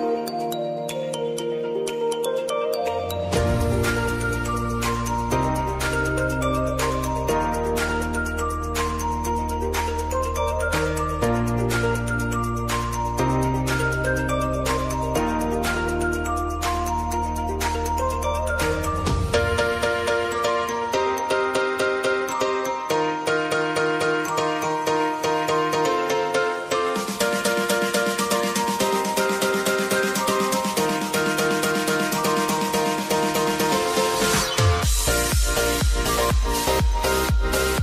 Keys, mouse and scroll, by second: 2.3 ctrl+z, 3.6-17.3 drag, 18.6 Return, 19.9-33.0 drag, 33.7-37.8 drag.